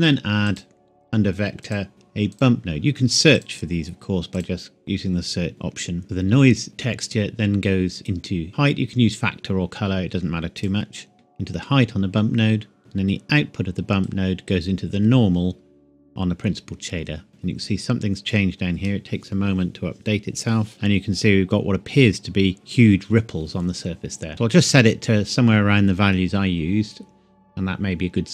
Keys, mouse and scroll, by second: 5.5 middle click, 5.7-6.0 scroll up 1, 6.0-6.7 scroll down 1, 8.1 click, 14.0 click, 21.2-21.7 scroll up 1, 22.4 scroll up 1.